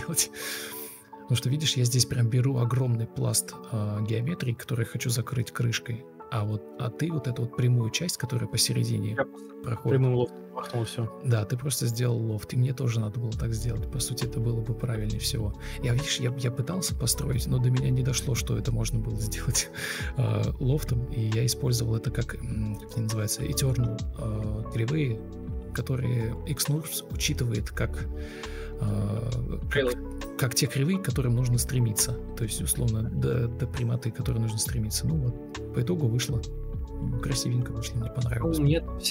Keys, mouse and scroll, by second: 13.3 Delete, 38.7 ctrl+alt+shift+v.